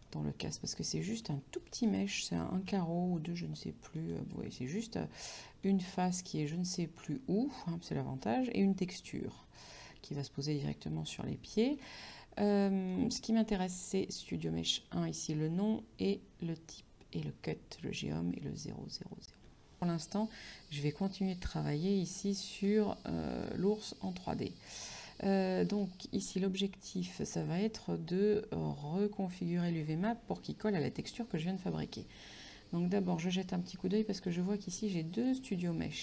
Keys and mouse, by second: 21.3 click, 22.1 middle click, 23.5 shift+middle click, 25.9 shift+middle click, 27.3 shift+middle click, 31.4 middle click, 34.3 click.